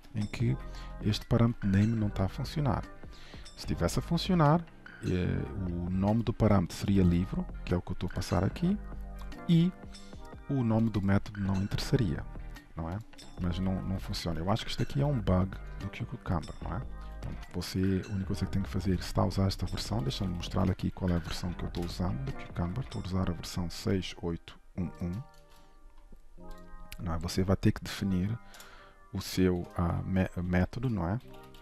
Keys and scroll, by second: 0.1 ctrl+shift+Left, 1.1 ctrl+shift+Right, 15.9 ctrl+shift+Right, 17.8 Delete, 18.9 ctrl+s, 20.2 ctrl+shift+n, 25.6 ctrl+Tab, 28.6 ctrl+shift+BackSpace, 30.5 ctrl+w.